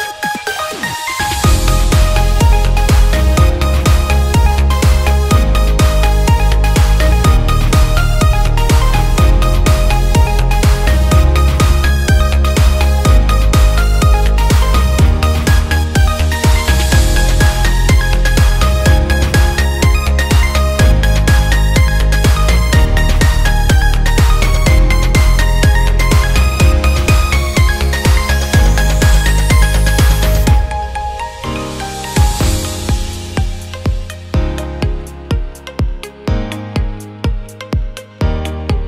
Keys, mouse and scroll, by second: 0.2 click, 0.8 click, 2.1 click, 2.8 click, 4.1-5.2 drag, 6.1 click, 7.0 ctrl+click, 7.8 Tab, 9.6 click, 11.9 click, 13.4 click, 16.6 click, 17.4 click, 20.3 click, 21.5-22.5 drag, 23.1 click, 23.8-24.9 drag, 25.0 click, 29.9 click, 31.6 click, 32.1-33.3 drag, 33.6 click, 34.5 click, 35.6 click, 37.2 click, 37.4 click.